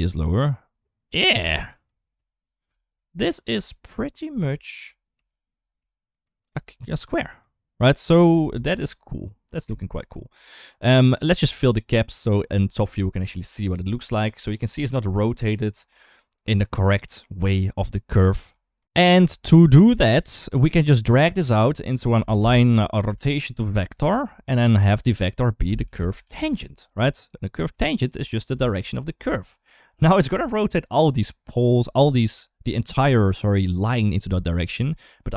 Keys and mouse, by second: 1.4 middle drag, 2.5 KP_8, 2.5 KP_7, 2.7 KP_7, 3.7-4.0 middle drag, 4.4 shift+middle drag, 4.7 middle drag, 5.1 shift+middle drag, 5.7 shift+middle drag, 6.1 shift+middle drag, 6.9 middle click, 8.2 KP_7, 9.0-9.4 middle drag, 9.6 shift+middle drag, 11.4 click, 12.6 KP_7, 13.8 shift+middle click, 14.6 shift+middle click, 18.4 shift+middle click, 18.6 ctrl+x, 20.9-23.6 drag, 23.8 shift+middle click, 24.8-27.1 drag, 27.7 shift+middle click, 28.4 click, 28.4-29.6 typing, 28.6 click, 30.2 shift+middle click, 35.0 middle click.